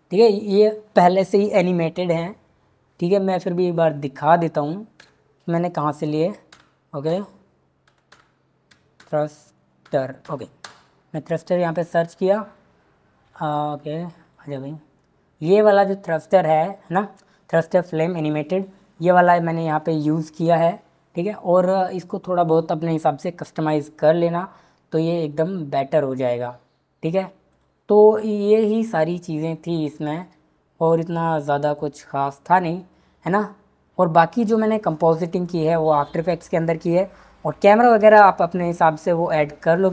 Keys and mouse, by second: 3.8-10.6 drag, 14.2 click, 27.5 click, 31.2 click, 37.7 click.